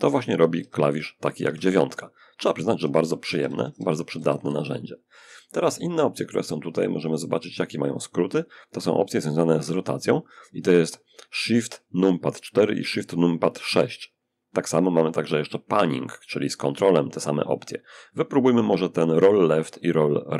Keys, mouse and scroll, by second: 0.7 1, 1.8-3.6 typing, 6.2 click.